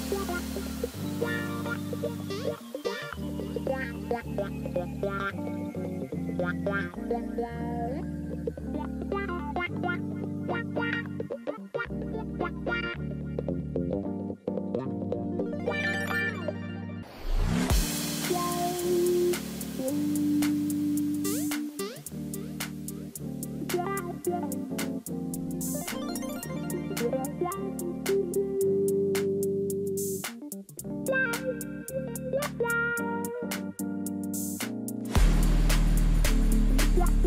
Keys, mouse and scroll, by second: 5.6-8.0 typing, 17.4 ctrl+click, 20.5 ctrl+click, 30.0 ctrl+j, 31.5 double click, 35.8 double click.